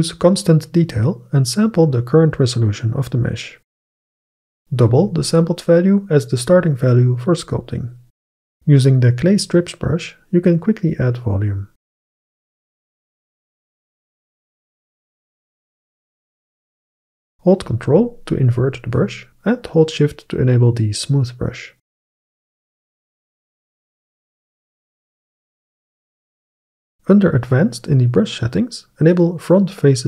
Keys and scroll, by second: 4.9 2, 5.7 Return, 11.3 ], 17.9 [.